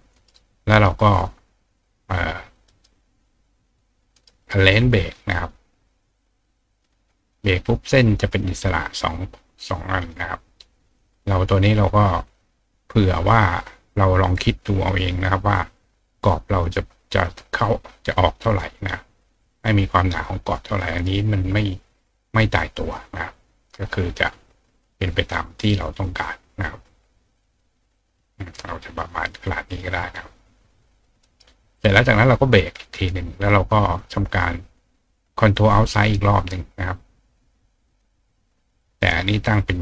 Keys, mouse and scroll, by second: 0.1 right click, 2.7 right click, 4.1 right click, 6.0 click, 6.8 click, 7.3 click, 8.3 click, 9.6 click, 10.0 click, 11.0 click, 15.2 click, 16.5 click, 18.0 click, 18.2 click, 18.7 click, 19.1 click, 20.7 click, 21.0 right click, 23.0 click, 25.6 click, 27.6 click, 31.2 right click, 32.4 click, 32.8 click, 33.4 click, 37.9 click, 39.7 click.